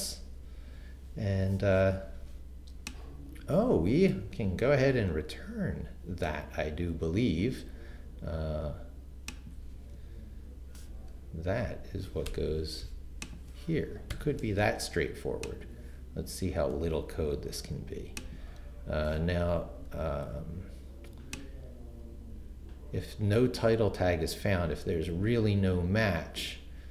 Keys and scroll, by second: 0.0-0.3 typing, 4.7 super+x, 9.9 super+v, 12.3 BackSpace, 14.1 shift+0, 17.3 super+c, 18.5 super+v.